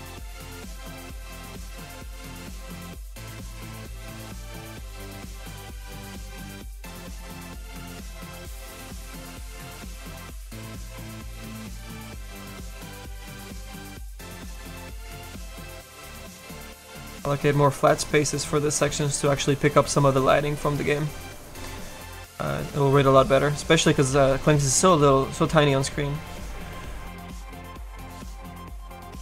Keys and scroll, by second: 24.1 s, 24.6 s, 25.2 s, 27.3 s, 27.7 s, 28.1 s.